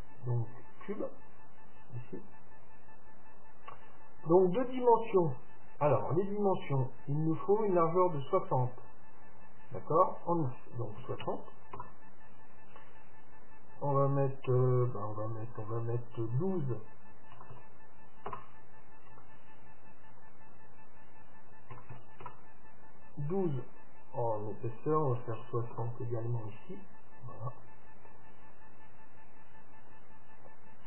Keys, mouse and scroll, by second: 2.7 click, 3.6-4.7 drag, 4.9-6.9 drag, 13.4-15.4 drag, 20.3-22.3 drag, 23.8-25.8 drag, 27.0-29.2 middle drag, 28.6-30.4 drag, 30.6-30.8 drag.